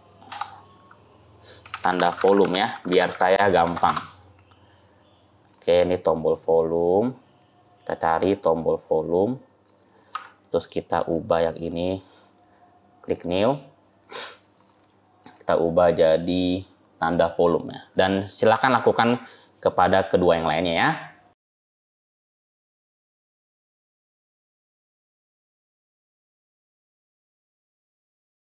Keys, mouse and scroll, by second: 5.0 click, 5.4 click, 7.8 click, 10.0 Tab, 10.8 click, 12.9 click, 15.1 click, 17.8 click, 18.4 Tab, 18.7 click, 20.6 click, 21.8 click, 22.1 click, 22.5 click, 22.7 click, 23.3 Tab, 23.4 click, 23.8 click, 24.1 click, 24.4 click, 25.1 Tab, 25.2 click, 25.3 Tab, 25.5 click, 25.9 click, 26.2 click, 26.3 Tab, 26.4 click, 26.7 click, 27.4 Tab, 27.5 click, 27.9 click, 28.2 click, 28.3 click, 28.4 Tab, 28.4 scroll down 5.